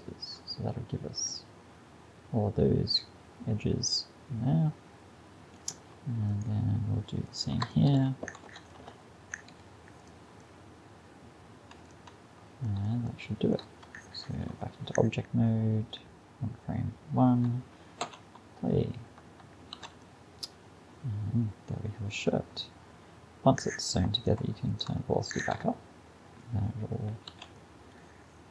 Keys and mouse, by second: 0.6 middle click, 1.8 middle drag, 2.2 middle click, 6.3-9.5 drag, 8.3 space, 9.5 x, 10.5 click, 14.2 Tab, 18.1 alt+a, 19.8 alt+a, 20.2-21.9 middle drag, 24.2-27.4 drag, 25.4 alt+a, 27.4 alt+a, 27.6-28.5 drag.